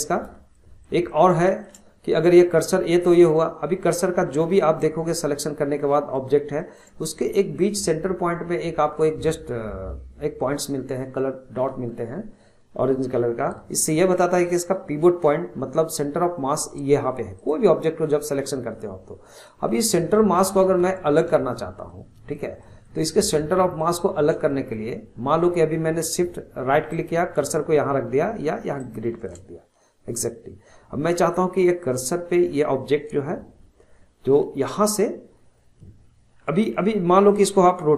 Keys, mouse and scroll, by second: 0.3 scroll up 1, 0.6-4.5 shift+middle drag, 4.5 click, 4.9-5.8 scroll up 7, 5.8-9.7 shift+middle drag, 17.4 click, 19.4-20.2 middle drag, 21.9-23.1 shift+middle drag, 23.1 shift+click, 23.5-26.9 shift+middle drag, 26.9-31.8 shift+right drag.